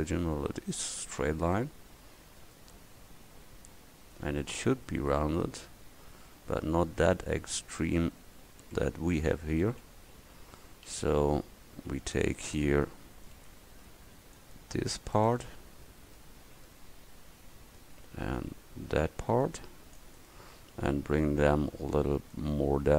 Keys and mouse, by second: 2.0 middle click, 4.4 Tab, 9.5 a, 10.3 v, 12.1 v, 13.5 c, 18.9 c.